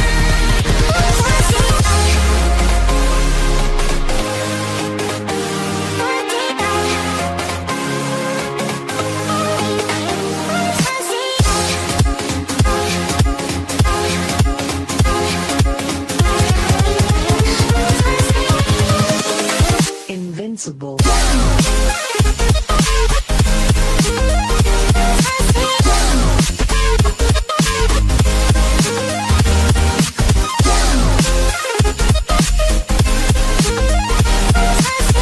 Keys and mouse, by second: 1.5 click, 4.5 click, 8.1 click, 11.9 click, 12.8 click, 19.4 click, 20.2 click, 21.5 click, 22.6 click, 25.1 click, 25.9 click, 25.9 KP_1, 26.1 Return, 29.9 click, 31.2 Return, 31.2 click, 31.2 KP_1, 31.8 Return, 31.8 KP_1, 31.9 click, 33.0 click, 34.7 Return, 34.7 click, 34.7 KP_1.